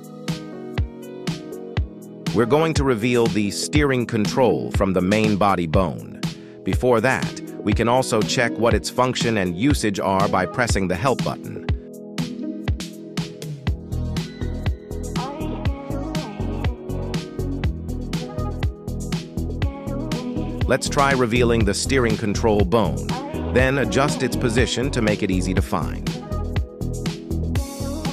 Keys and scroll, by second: 15.4 Escape, 21.9 KP_3, 22.4 g.